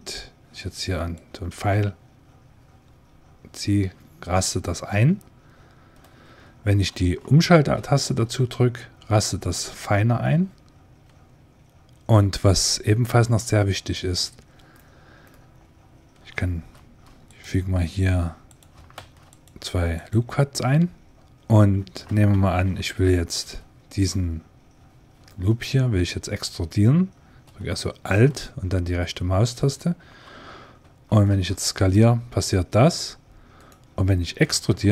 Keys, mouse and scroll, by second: 1.0 click, 2.1 click, 13.2-16.4 middle drag, 16.6 ctrl+r, 18.8 ctrl+r, 22.2 ctrl+Tab, 25.1-26.9 middle drag, 29.4-32.2 right drag, 31.2 s, 34.3 e.